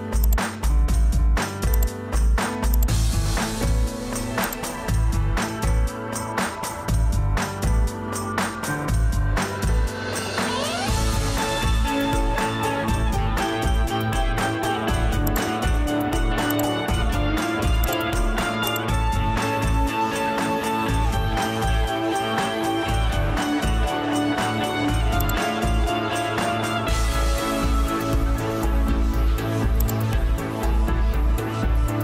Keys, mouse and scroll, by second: 22.7 Return, 29.9 click.